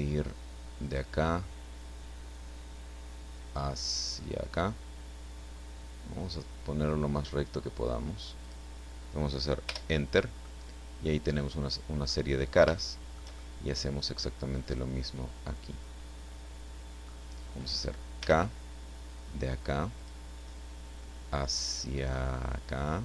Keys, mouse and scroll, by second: 0.8 click, 8.5 click, 9.7 Return, 10.4 click, 10.5-12.3 middle drag, 12.7-15.1 shift+middle drag, 15.1-17.2 drag, 17.2-19.1 middle drag, 18.2 k, 19.9 click.